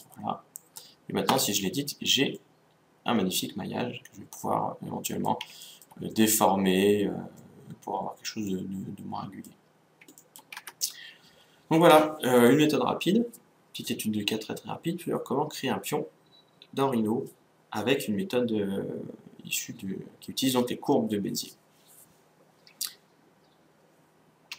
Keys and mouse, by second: 1.4 Tab, 2.4 middle click, 3.6 middle click, 5.7-10.6 middle drag, 10.6 Tab.